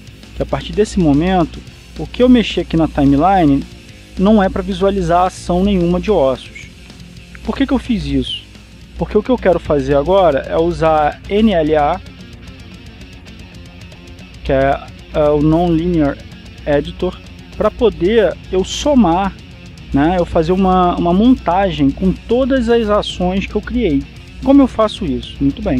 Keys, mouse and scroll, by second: 3.2-5.3 drag, 8.5 click, 12.7 click, 14.3 click, 17.2-18.8 drag, 21.8-22.3 scroll down 1.